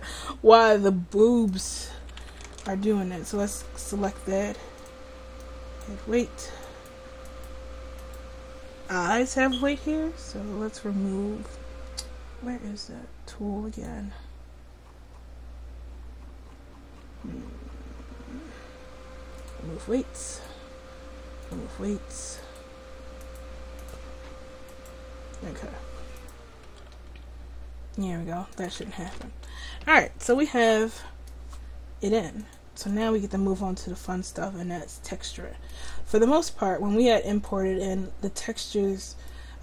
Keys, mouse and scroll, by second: 2.1 a, 2.3 a, 2.6 alt+r, 5.9 click, 13.8-20.4 drag, 26.9 r, 28.8 a, 29.0 a, 29.2 alt+r, 33.1 click, 33.7-34.9 middle drag.